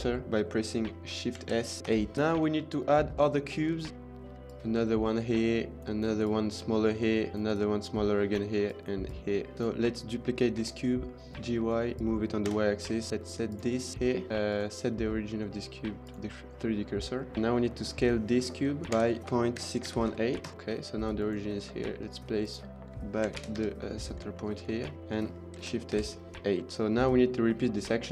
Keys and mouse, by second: 1.3 shift+s, 2.1 shift+middle click, 3.0-3.4 middle drag, 3.7 shift+middle click, 4.2 click, 6.1 click, 7.3 click, 8.9 click, 9.5 click, 10.5 shift+d, 11.3 g, 11.3 y, 12.5 KP_7, 13.1 Tab, 13.4 click, 13.9 shift+s, 16.5 middle click, 17.2 click, 19.0-20.4 typing, 20.4 KP_Enter, 21.6 click, 22.0 Tab, 22.2 click, 23.3 shift+s, 23.5 Tab, 23.8 middle click, 24.2-24.6 shift+middle drag, 24.7 middle drag, 25.5 shift+s, 26.7 ctrl+s.